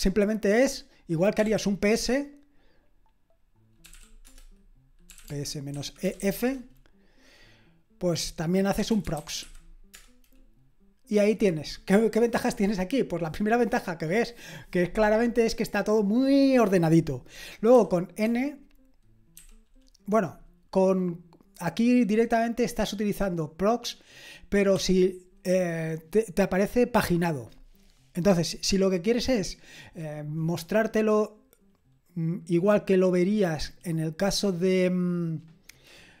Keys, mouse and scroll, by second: 1.4-1.9 typing, 3.6-6.7 typing, 8.6-9.9 typing, 18.3 typing, 19.4 typing, 24.8 typing.